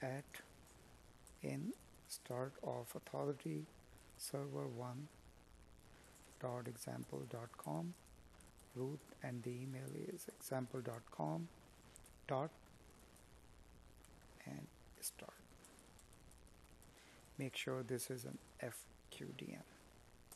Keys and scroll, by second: 0.3 space, 4.7 space, 9.6 space, 11.9 Escape, 15.3 Escape, 17.6 Tab.